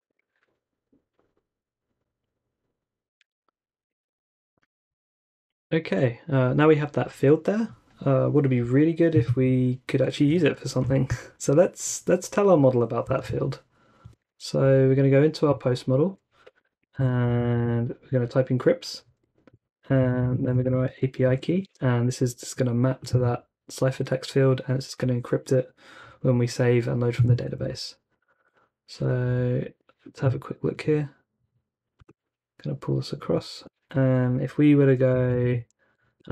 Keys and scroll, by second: 0.0-0.4 typing, 2.3 typing, 3.1 super+Tab, 3.8 super+Tab, 4.0 super+Tab, 13.2 super+Tab, 14.0 super+Tab, 14.2 super+Tab, 16.7-17.2 typing, 17.5 super+v, 19.7-21.2 typing, 21.6 super+s, 22.8-23.5 typing, 27.6 super+Tab, 28.1 super+Tab, 28.3 super+Tab, 29.2 Up, 29.7 shift+Return, 35.1-36.3 typing.